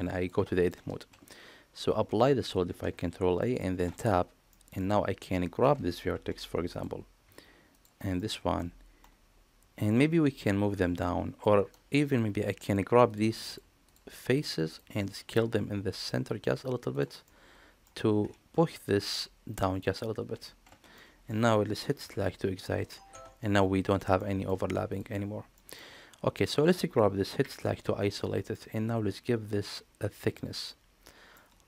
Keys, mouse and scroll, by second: 2.5 ctrl+a, 3.3 middle click, 3.7 Tab, 4.4 middle click, 6.0 1, 7.6 shift+click, 8.0 middle click, 8.9 middle click, 10.2 shift+click, 10.7 middle click, 12.2 3, 13.3 shift+click, 13.7 click, 14.5 click, 15.2 s, 17.1 middle click, 20.9 middle click, 23.0 Tab, 24.0 middle click, 24.8 drag, 25.4 middle click, 26.2 click, 28.4-31.2 middle drag.